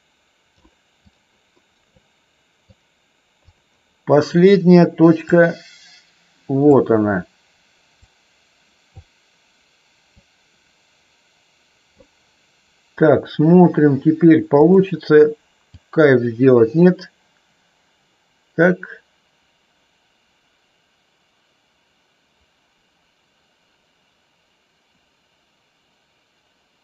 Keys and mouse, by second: 1.0 click, 2.7 click, 5.1-6.7 drag, 7.9-8.9 drag, 10.0-11.9 drag, 15.7-26.8 drag.